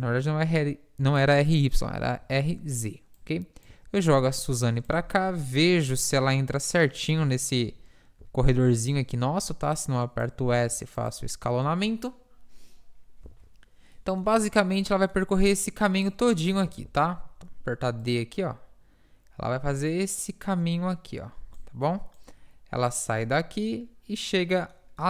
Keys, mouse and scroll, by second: 2.2 KP_1, 3.7 z, 5.3 KP_7, 8.3 s, 10.6 s, 11.7 z, 13.3 z, 14.3 z, 15.7-16.7 drag, 16.7 ctrl+z, 17.7 d, 18.1-19.8 drag, 20.2 d, 21.6-23.6 d, 24.2 d, 24.4-25.0 middle drag.